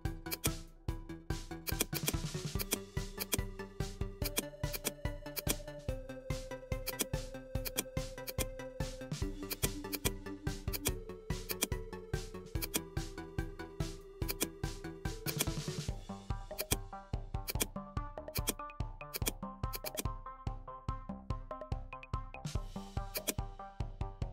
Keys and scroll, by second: 20.8 shift+p, 21.2 shift+o, 21.3 shift+w, 21.6 shift+e.